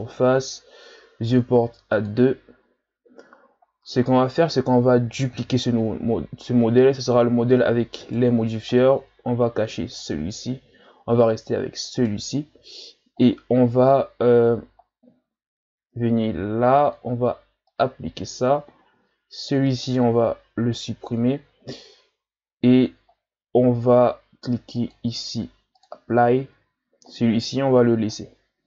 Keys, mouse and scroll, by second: 1.9-5.1 drag, 5.7 shift+d, 10.1 click, 11.9 right click, 14.2 scroll up 1, 16.8-22.7 drag, 24.8-27.8 drag.